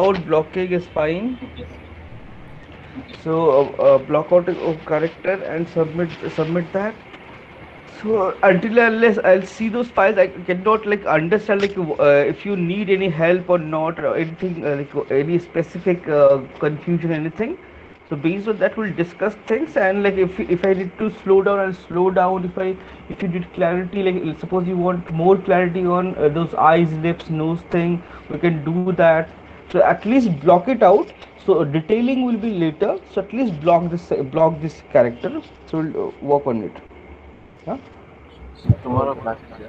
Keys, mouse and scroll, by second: 39.3 click.